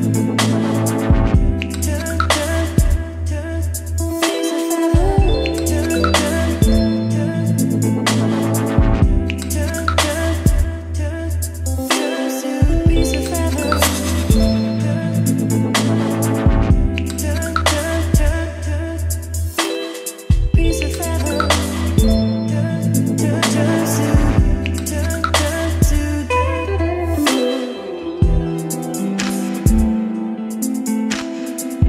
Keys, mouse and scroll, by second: 1.3-2.3 scroll down 2, 2.3 scroll down 1, 2.3-4.4 drag, 4.4 F5, 6.2-9.5 drag, 9.5 F5, 10.7-17.6 drag, 17.6 middle click, 18.4 click, 18.7 middle click, 19.2 F5, 23.5-28.9 drag, 28.9-31.8 right drag.